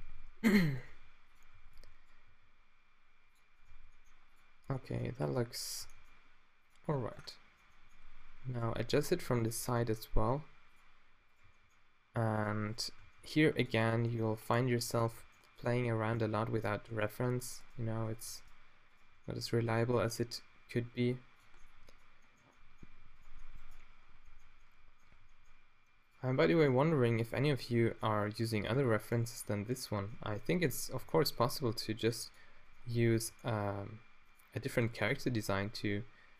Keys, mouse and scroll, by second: 0.1-2.3 typing, 3.7 g, 4.8 g, 5.9 g, 6.9 middle click, 8.5 click, 9.3-11.3 drag, 9.7 g, 11.5 g, 12.5-13.7 drag, 13.0 g, 13.9 g, 15.2 g, 15.9-17.2 middle drag, 17.2 click, 19.3 click, 19.9 g, 23.2 right click, 25.2 g, 27.9 middle click, 29.1 middle click, 29.5 click, 30.6-36.3 drag, 31.0 g, 33.2 g, 35.2 g.